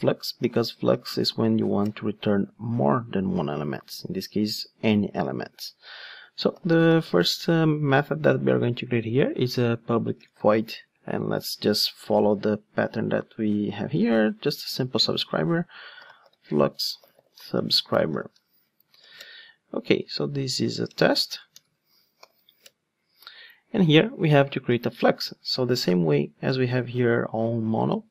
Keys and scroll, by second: 5.3 Tab, 12.1 ctrl+Tab, 20.5 Tab, 22.7 Return, 25.7 ctrl+Tab.